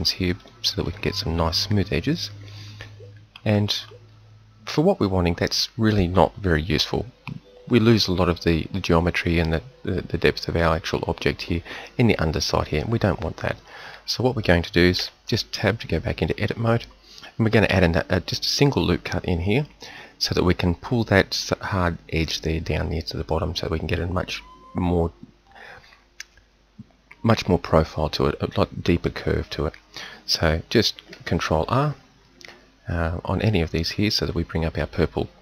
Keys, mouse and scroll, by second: 15.0 Tab, 31.8 ctrl+r.